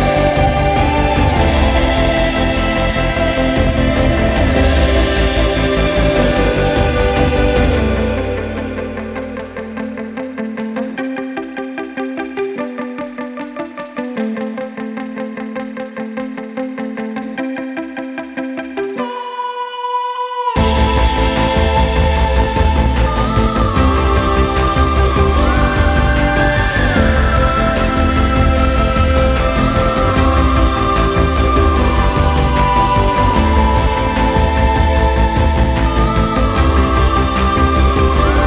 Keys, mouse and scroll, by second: 0.5 click, 1.4 click, 1.9 click, 2.8 click, 3.6-4.0 drag, 4.6 right click, 5.6 click, 6.4 click, 7.4 click, 8.0-8.5 drag, 8.7 click, 10.1 click, 11.5 click, 12.1 click, 13.0 click, 14.5 drag, 14.9 click, 17.4 click, 18.1-18.6 drag, 20.6 click, 21.2 shift+click, 22.9-23.6 drag, 23.7 right click, 24.7 click, 25.2 right drag, 26.1 click, 26.9 click, 28.4-28.9 drag, 30.1-30.7 drag, 31.7 click, 32.9 click, 33.3 drag, 33.6 click, 36.2 drag, 37.2-37.9 drag.